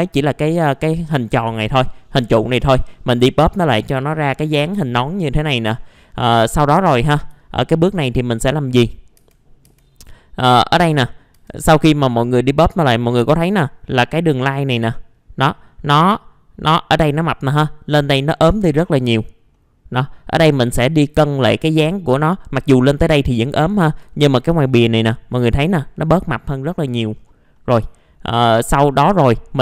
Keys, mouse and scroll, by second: 2.9-3.3 scroll up 1, 3.5 click, 5.2 middle click, 5.7-6.3 scroll up 1, 6.3 click, 7.4 alt+middle click, 8.1 middle click, 8.5-9.1 scroll up 1, 9.1 F4, 9.9 scroll down 1, 10.4 middle click, 11.3 F4, 11.8 middle click, 19.1-19.5 scroll down 1, 19.5 middle click, 20.0-20.7 scroll up 1, 20.7-24.0 middle drag, 24.1 alt+middle click, 24.6 scroll up 1, 27.1-27.5 scroll down 1, 27.5 middle click, 27.9 alt+middle click, 28.5-29.6 scroll up 1.